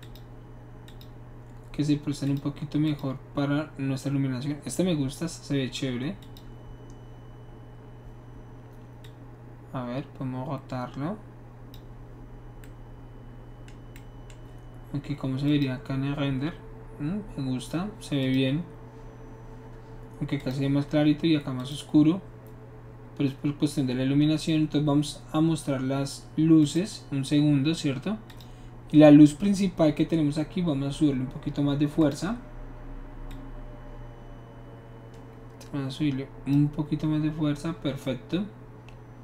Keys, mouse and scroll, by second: 0.0 click, 0.9 click, 2.2 click, 2.8 click, 6.2 click, 9.0-11.7 drag, 15.4 click, 18.2 click, 20.4 click, 21.6 click, 26.6 click, 28.2 click, 32.0 click, 33.3-36.5 drag.